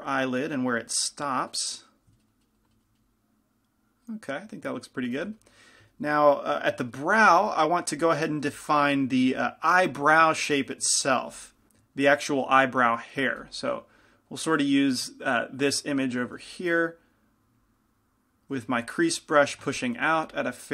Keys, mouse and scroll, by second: 1.9-3.2 drag, 5.2 f, 7.5 f, 8.1 f, 8.7 f, 9.4 f, 11.1 click, 11.5-16.6 middle drag, 11.5 f, 16.6 f, 16.9-18.0 middle drag, 18.0-20.0 drag, 18.8 f, 20.0 shift+f.